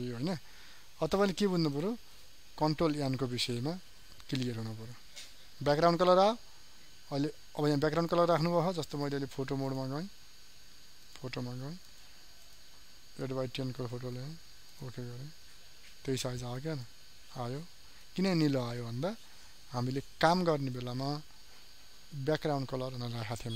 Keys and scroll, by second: 20.6 ctrl+n.